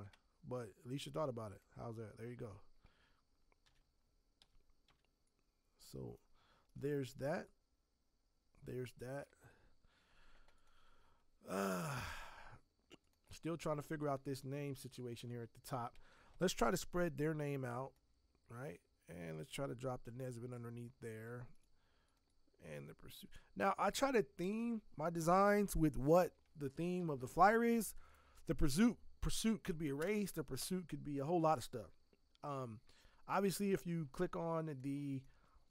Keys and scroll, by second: 3.6 b, 4.4 Escape, 4.8 v, 26.9 ctrl+s.